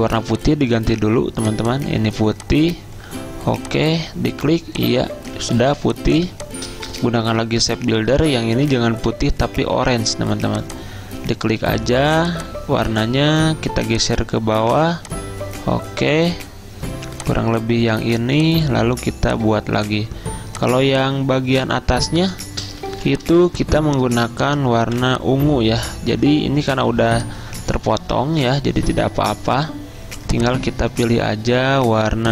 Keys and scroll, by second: 5.6 z, 7.5 m, 23.0 z, 24.9 v, 27.8 ctrl+z.